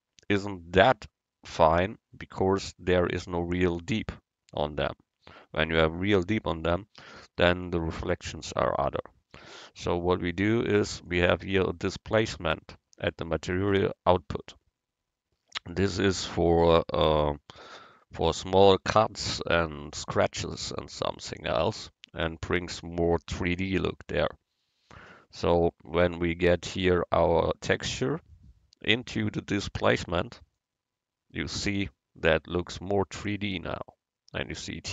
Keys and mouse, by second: 1.1-2.9 drag, 4.2-6.0 drag, 10.4-12.2 drag, 23.3-28.3 middle drag, 28.4-30.2 drag, 31.9-34.9 middle drag.